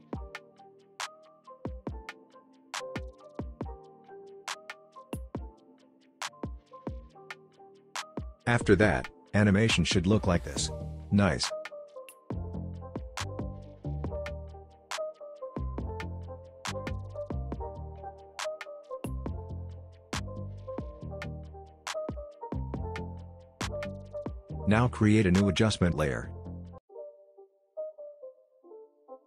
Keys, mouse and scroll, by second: 18.8-20.6 scroll up 1, 21.6 click, 22.5 r, 24.0 click, 24.7 right click, 25.4 click.